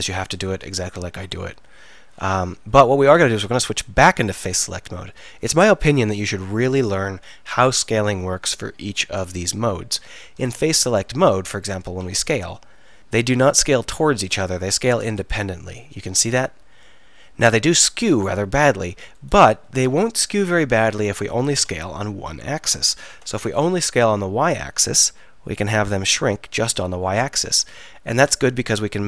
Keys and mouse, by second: 4.1-6.0 drag, 12.0 s, 20.4 click, 21.6 s.